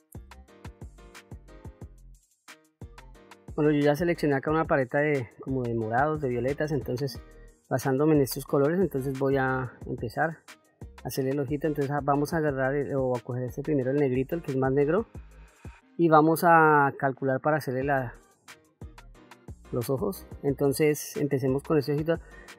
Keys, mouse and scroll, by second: 0.6 click, 8.5 middle click, 9.9 shift+middle click, 13.0 click, 14.7 middle click, 18.2 middle click, 21.1 f.